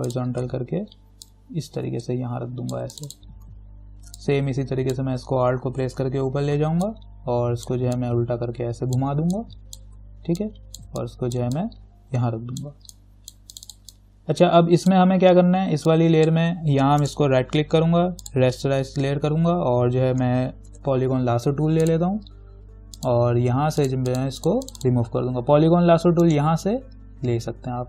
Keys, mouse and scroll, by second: 0.3 click, 1.5-3.2 alt+drag, 4.4-6.1 alt+drag, 6.1 ctrl+t, 7.1-10.6 alt+drag, 10.6-17.2 alt+drag, 17.2 right click, 18.4 click, 18.5 click, 20.9 l, 22.1 click, 26.5 right click.